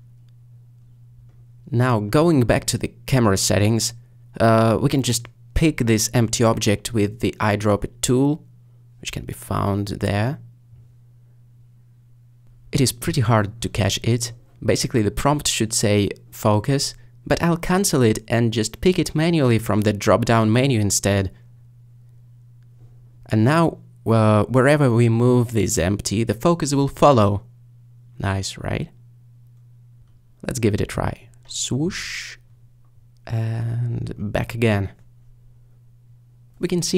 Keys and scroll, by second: 29.7 alt+g.